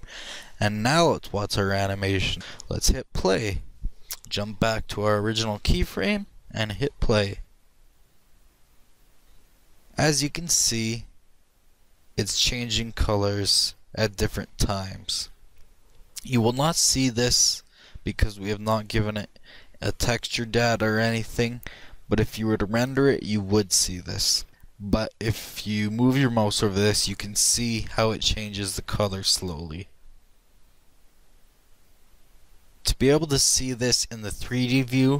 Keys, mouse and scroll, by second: 5.1 Down, 5.3-5.8 Down, 6.0 Down, 6.2 Down, 6.6 Down, 7.4 click.